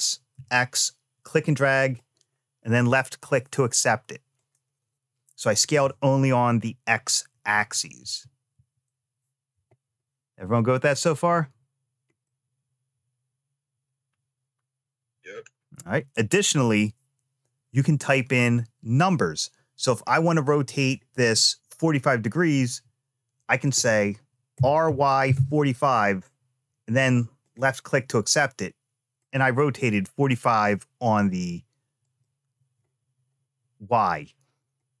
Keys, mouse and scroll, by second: 4.1 click, 7.8 ctrl+z, 8.3 ctrl+z, 12.0-16.1 middle drag, 19.9-22.3 middle drag, 24.3 r, 28.1 middle click, 31.8 click.